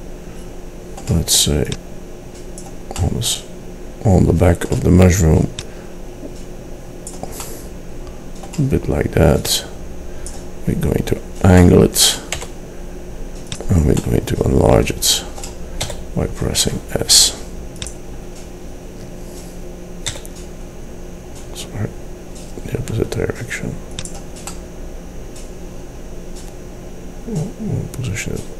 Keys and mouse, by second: 3.1 middle click, 5.7-7.4 drag, 7.4 middle click, 9.5-11.3 drag, 11.3 middle click, 12.4-13.6 drag, 12.4 r, 15.9 s, 20.3 s.